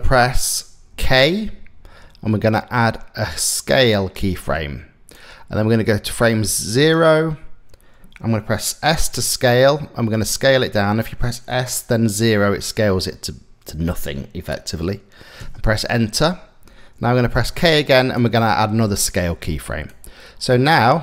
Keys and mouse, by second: 0.5 k, 4.7-6.5 drag, 8.7 s, 17.0 k, 19.5 click, 20.6-21.0 drag.